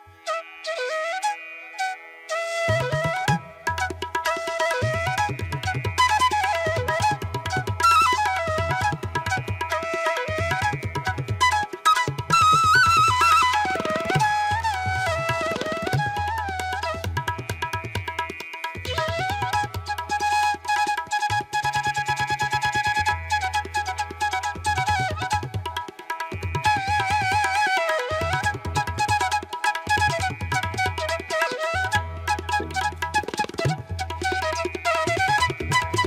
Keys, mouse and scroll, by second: 10.2 ctrl+-, 16.3 ], 18.5 ], 19.6 ctrl+alt+z, 19.8 ], 21.7 ctrl+-, 35.2 right click.